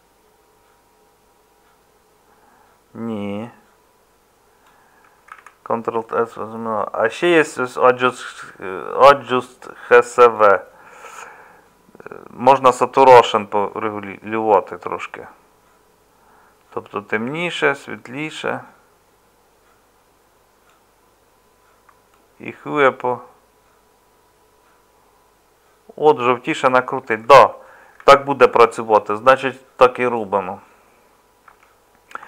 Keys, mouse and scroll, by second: 5.3 ctrl+z, 28.0 ctrl+z, 31.4 Tab.